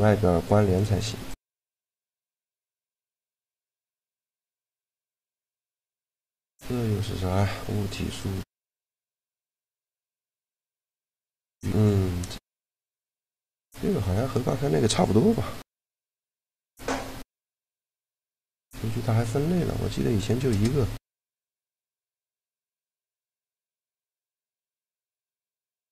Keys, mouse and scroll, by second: 0.8 x, 1.5 right click, 1.6 x, 2.3 x, 4.3 shift+l, 8.5 middle click, 9.1-10.7 right drag, 10.2 shift+l, 11.6-13.9 middle drag, 13.9-15.0 drag, 15.5 Tab, 16.6 shift+l, 19.5 a, 19.9 click, 21.8 right click.